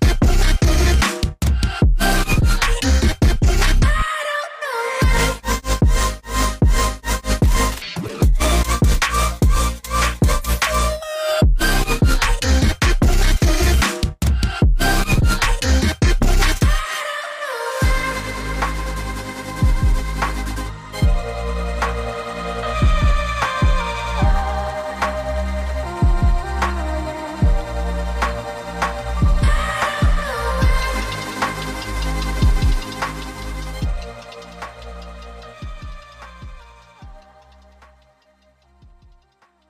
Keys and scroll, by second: 0.6 Return, 24.9 z.